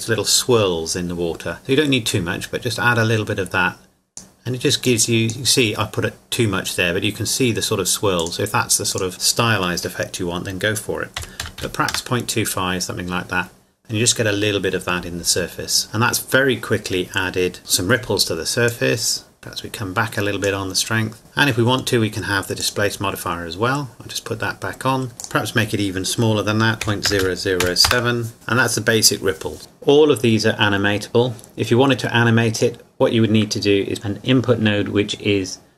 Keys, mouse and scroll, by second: 2.1 click, 8.2 click, 11.2 KP_Decimal, 11.4 KP_2, 11.6 KP_5, 11.9 KP_Enter, 15.8-16.3 scroll down 1, 17.6-18.5 scroll up 1, 18.7 click, 22.6 click, 25.2 click, 26.8 KP_Decimal, 27.1 KP_0, 27.6 KP_7, 27.9 KP_Enter, 28.3 click, 29.7 scroll down 1, 32.5 click.